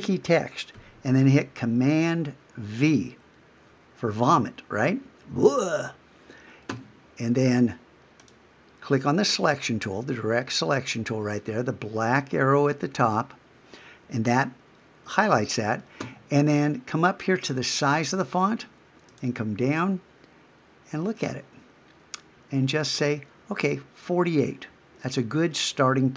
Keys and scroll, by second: 2.8 super+v.